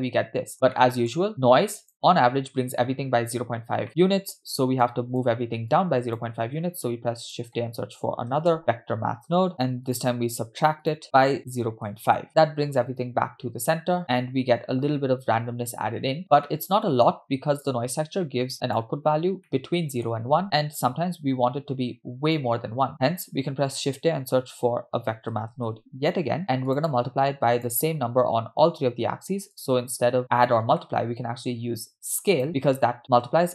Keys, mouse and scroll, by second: 0.5 scroll down 1, 0.7 middle click, 1.4 click, 3.6 scroll down 2, 3.9 middle click, 4.9-5.2 drag, 5.8-6.2 drag, 6.6 shift+a, 11.0-12.3 drag, 11.0 scroll up 2, 12.7-14.0 middle drag, 14.2 middle click, 15.3-16.2 scroll up 5, 16.2 scroll down 3, 16.5-17.1 middle drag, 17.7-18.9 drag, 19.1-19.5 scroll down 2, 19.5 middle click, 20.4 middle click, 20.4 scroll down 1, 21.9-22.3 scroll down 1, 22.4 click, 23.3 shift+a, 28.0-29.1 scroll up 3, 29.2-29.5 scroll up 2, 29.6-32.5 drag.